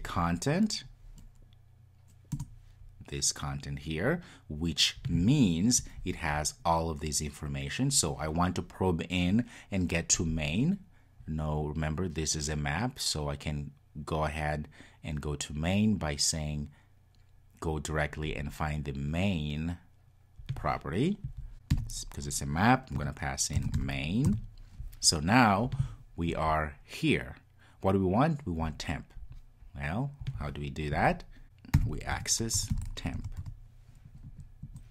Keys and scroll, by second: 2.4 Return.